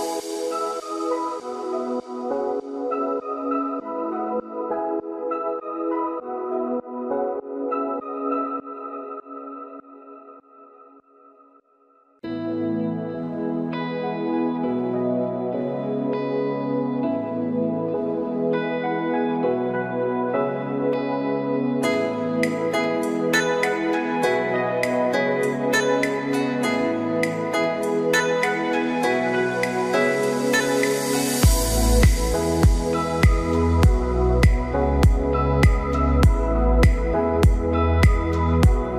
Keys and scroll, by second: 2.0 Delete, 3.5 ctrl+d, 10.2 ctrl+d, 18.8 Delete, 35.0 ctrl+a, 36.9 ctrl+d.